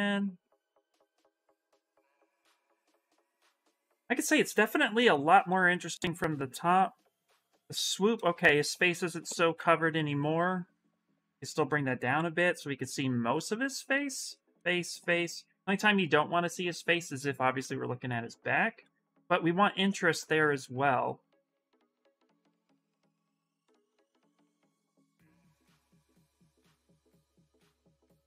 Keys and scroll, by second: 9.3 ctrl+z, 9.8 w, 11.9 q.